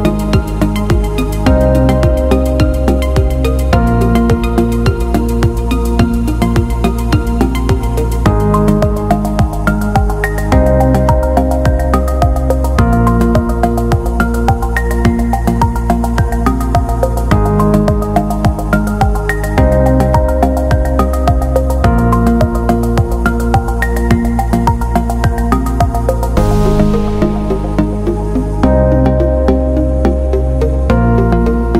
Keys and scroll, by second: 27.1 ctrl+[.